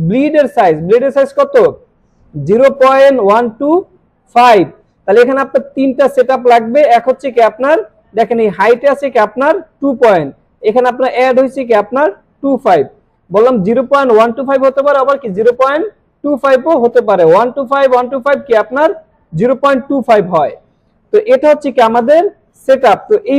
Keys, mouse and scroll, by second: 21.6 scroll up 1, 22.5 scroll down 1.